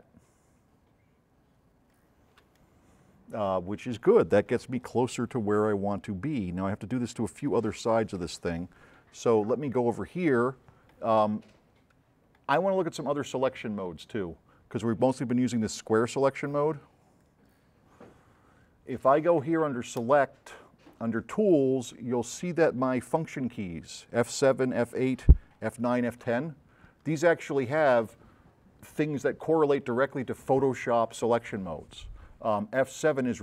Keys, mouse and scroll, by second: 15.1-15.7 drag, 16.3 click, 17.1 click, 20.1 click.